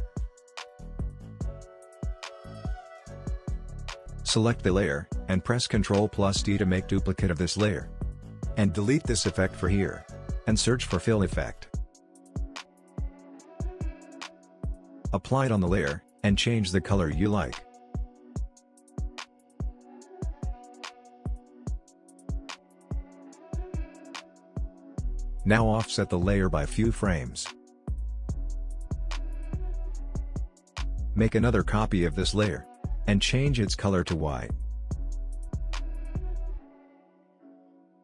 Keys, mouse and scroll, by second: 3.1-5.6 drag, 6.9 ctrl+d, 8.6-13.2 drag, 13.2-13.6 typing, 15.0-27.8 drag, 27.8-28.1 alt+scroll up 1, 28.4 click, 31.2 ctrl+d, 32.5-37.2 drag.